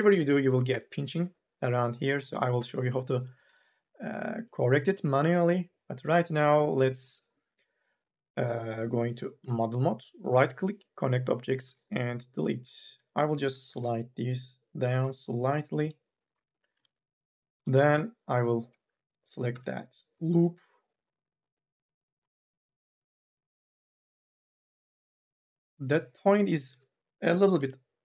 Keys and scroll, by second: 9.2 4, 12.7 2, 13.5 m, 14.0 o, 16.5 2, 17.0 e, 19.3 t, 26.4 1, 26.7 e, 27.3 m, 27.7 o.